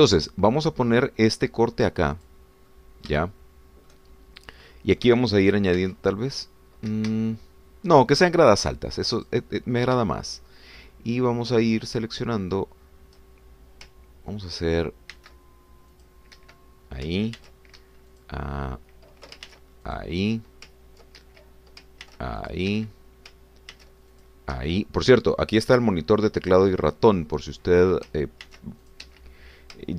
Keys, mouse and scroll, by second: 1.1 click, 3.2 click, 3.7-5.1 middle drag, 6.8 ctrl+r, 7.9 Escape, 9.0 middle click, 10.2 click, 16.2 ctrl+r, 16.9 click, 17.4 Escape, 18.4 ctrl+r, 18.8 ctrl+Escape, 19.1 ctrl+click, 20.5 ctrl+r, 20.9 ctrl+click, 22.2 ctrl+Escape, 23.0 ctrl+r, 23.4 ctrl+click, 23.7 ctrl+Escape, 24.8 ctrl+r, 25.1 ctrl+click, 25.6 Escape, 29.5 ctrl+r, 29.9 ctrl+click.